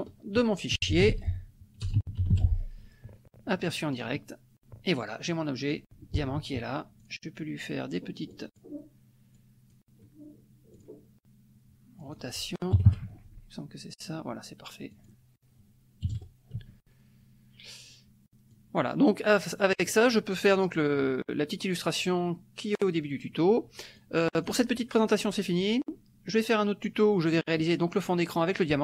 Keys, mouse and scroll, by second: 0.5-2.7 typing, 4.0 click, 5.4-6.5 drag, 7.0 click, 8.3 click, 9.4 click, 10.7 click, 12.0 click, 12.7 KP_2, 12.9 KP_5, 13.1 Tab, 14.9 click, 16.1 KP_1, 16.6 Tab, 18.5-20.0 drag, 24.0-28.8 drag.